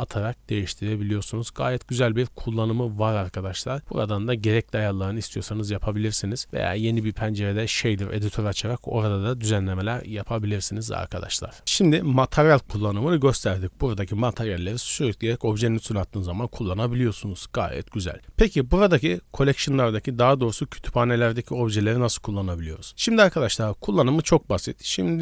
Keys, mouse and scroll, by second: 3.8 click, 4.0-6.4 scroll down 8, 10.0 click, 11.1-11.5 middle drag, 14.6 click, 16.0 middle drag, 19.1 click, 21.3 click, 21.7 click, 22.3 scroll down 1, 22.7 middle click, 23.4 shift+middle drag, 23.9 click.